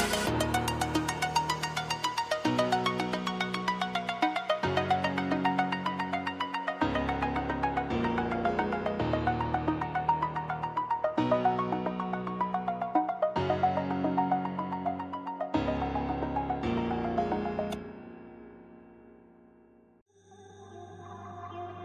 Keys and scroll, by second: 13.8 ctrl+alt+shift+e, 15.8 ctrl+j, 16.4 shift+a.